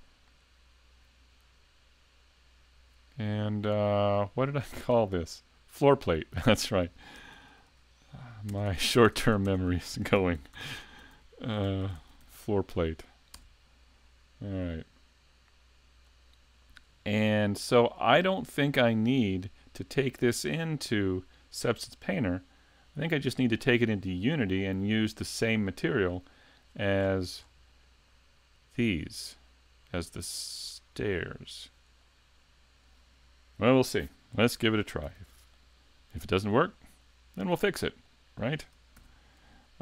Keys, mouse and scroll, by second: 0.1 click, 16.2 click, 27.0-30.7 scroll down 11, 31.2 shift+middle click, 32.1 middle click, 34.4 middle click, 34.6 a, 35.2 s, 36.1 shift+middle click, 36.8 middle click, 37.6 shift+middle click, 38.1 middle click, 39.0 shift+c, 39.6 shift+middle click.